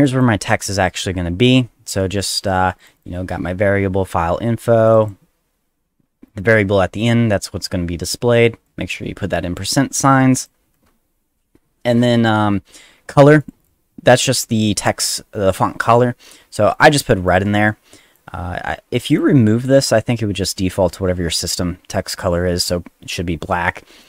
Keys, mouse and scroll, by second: 0.1 click, 2.8 click, 5.0 click, 8.6 click, 10.4 click, 13.4 click, 13.6 click, 16.7 click, 17.2 click, 18.9 click, 19.1 click.